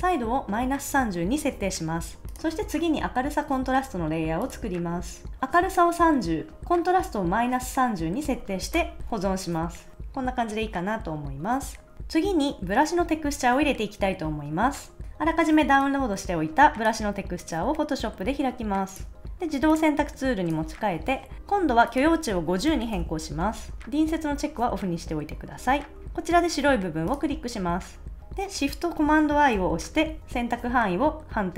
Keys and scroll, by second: 2.2 super+z, 8.7 Return, 9.1 super+s, 15.0 a, 22.4-23.4 typing.